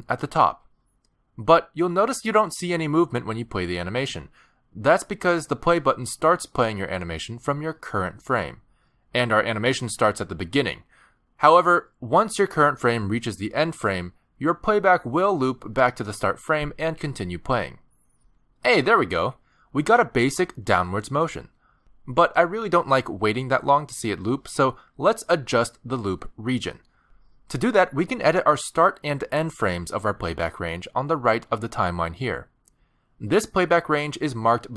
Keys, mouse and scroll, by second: 0.8 click, 20.8 space, 22.4 click.